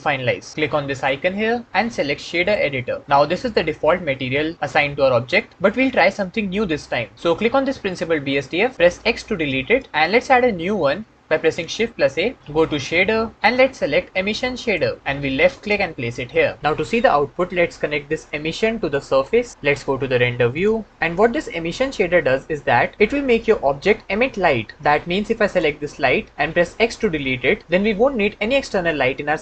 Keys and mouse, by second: 0.8-2.5 drag, 4.7 middle click, 8.8 x, 11.4 shift+a, 18.3-19.1 drag, 25.2-25.6 drag, 26.4 x.